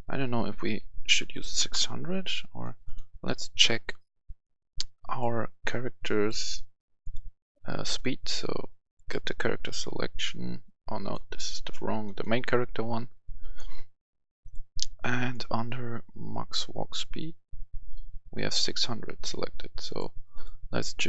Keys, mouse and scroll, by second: 1.0 typing, 1.5 Return, 2.5 click, 19.6-21.0 drag.